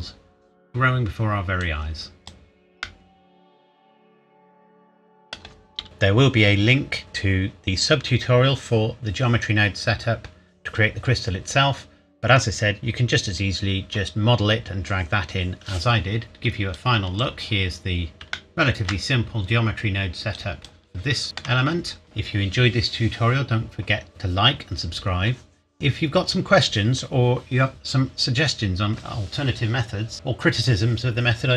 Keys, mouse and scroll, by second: 0.1 scroll down 1, 1.2 scroll down 1, 1.6 click, 2.8 middle click, 16.7 click, 17.4 scroll down 1, 18.3 shift+middle click, 18.9 scroll down 1, 20.3 click, 21.2 shift+middle click.